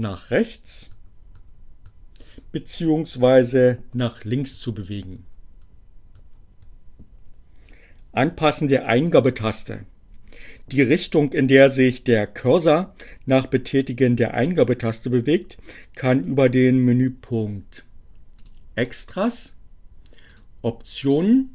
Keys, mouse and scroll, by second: 4.9 shift+Tab, 18.2 click, 20.3 click.